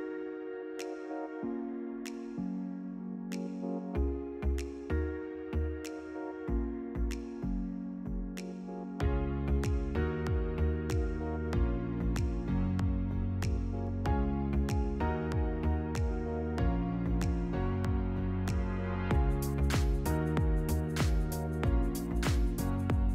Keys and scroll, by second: 7.6 ctrl+-, 9.6 ctrl++.